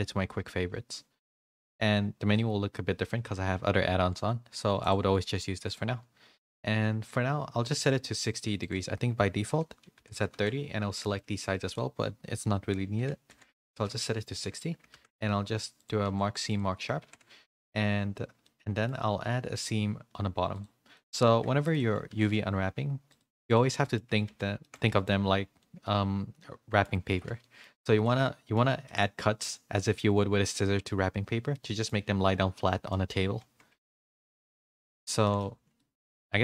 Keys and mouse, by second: 4.9-5.7 drag, 8.6-10.4 drag, 11.7-13.9 drag, 14.9 ctrl+e, 16.0 ctrl+e, 17.0 a, 17.6 a, 18.4 middle click, 19.5 click, 19.5 2, 20.5 click, 20.9 middle click, 22.0 ctrl+e, 23.5 middle click, 24.0 a, 24.2 a, 24.6 shift+middle click, 24.8 middle click, 25.5-26.8 middle drag, 27.1 a, 27.2 a, 27.4 middle click, 28.0 middle click, 28.8 shift+middle click, 29.2 middle click, 29.7 middle click, 31.5 middle click, 32.9 middle click, 33.2 a, 33.3 a, 33.8 shift+middle click, 34.0 middle click, 34.4 a, 34.6 a, 35.2 shift+middle click, 35.4 a, 35.7 middle click.